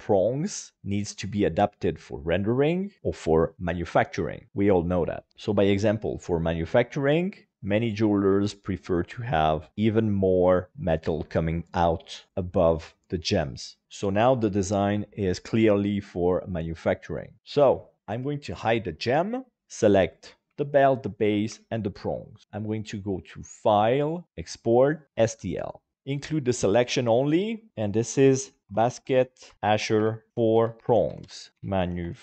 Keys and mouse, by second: 5.3 shift+middle click, 5.5 middle click, 7.2 middle click, 10.9 click, 11.8 middle click, 13.5 middle click, 14.6 KP_5, 15.0-17.0 middle drag, 17.4 middle click, 19.1 h, 20.0 right click, 20.6 shift+right click, 21.1 shift+right click, 23.7-25.2 drag.